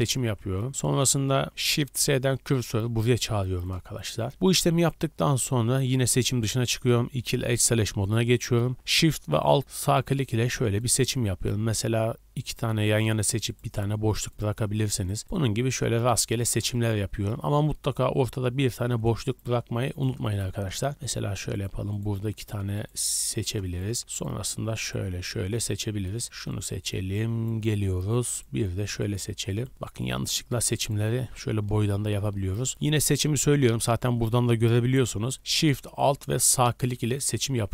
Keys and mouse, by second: 1.8 shift+s, 4.7 click, 5.4 a, 5.5 a, 7.1 2, 8.8-9.8 alt+shift+middle drag, 9.8 alt+shift+click, 10.0 alt+shift+middle click, 10.8 alt+shift+click, 10.9-12.4 alt+shift+middle drag, 12.4 alt+shift+click, 12.6 alt+shift+middle click, 13.4 alt+shift+click, 13.6 alt+shift+middle click, 14.3 alt+shift+click, 14.4 alt+shift+middle click, 15.0 alt+shift+click, 15.1 alt+shift+middle click, 15.2 alt+shift+click, 16.3 alt+shift+click, 18.6 alt+shift+click, 19.9 alt+shift+click, 21.5 alt+shift+click, 21.9 alt+shift+click, 22.3 alt+shift+click, 22.7 alt+shift+click, 23.3 alt+shift+click, 23.5 alt+shift+middle click, 24.1 alt+shift+click, 24.2 alt+shift+middle click, 24.8 alt+shift+click, 24.9-26.2 alt+shift+middle drag, 26.2 alt+shift+click, 26.3-27.3 alt+shift+middle drag, 28.3 alt+shift+click, 29.0 alt+shift+click, 29.5 alt+shift+click, 30.0 alt+shift+click, 30.3 middle click, 31.0-34.2 alt+shift+drag.